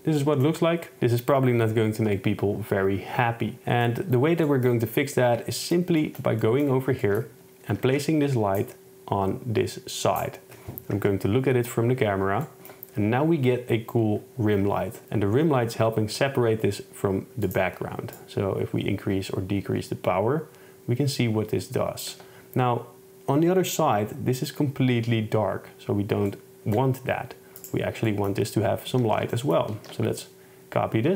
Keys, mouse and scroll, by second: 2.0 KP_0, 7.9 shift+Tab, 8.6 right click, 8.8 middle click, 11.1 KP_0, 27.6 click, 28.1 middle click, 29.1 shift+Tab, 29.4 middle drag, 29.8 shift+d.